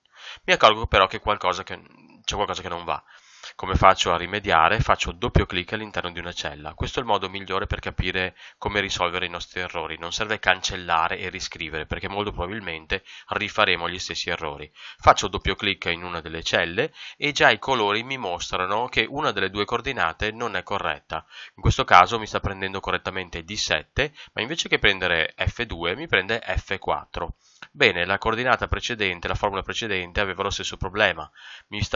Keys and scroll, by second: 9.6 Escape, 27.6 Escape.